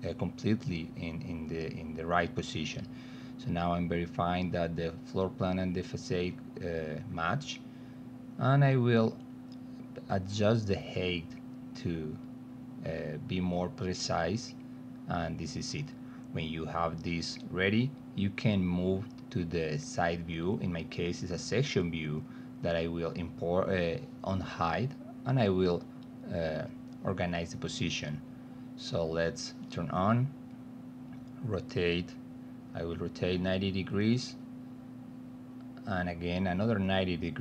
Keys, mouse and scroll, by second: 0.3-1.5 alt+middle drag, 3.5-5.6 alt+middle drag, 6.1 middle click, 6.8 alt+middle click, 7.5 click, 8.8-9.8 drag, 10.3 ctrl+z, 11.1 middle click, 12.8-14.7 drag, 15.1-18.4 alt+middle drag, 19.9 space, 20.5 click, 21.5 f, 22.2 middle click, 23.0 middle click, 23.7 middle click, 24.2 middle click, 24.9 middle click, 29.0 click, 29.6 middle click, 30.0 alt+middle click, 30.9 middle click, 31.5 alt+middle click, 32.6-33.0 drag, 33.1 middle click, 33.6 e, 34.2 alt+middle click, 35.1-36.3 drag.